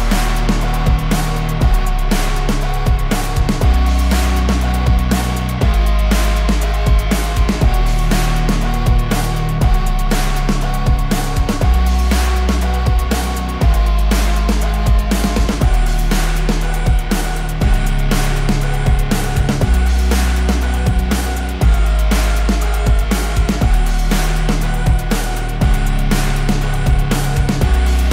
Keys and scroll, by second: 8.3 KP_Subtract, 8.8 KP_1, 8.9 KP_2, 9.2 Return, 14.0 Escape, 23.3 KP_Subtract, 23.7 KP_2, 23.9 KP_5, 24.2 Return.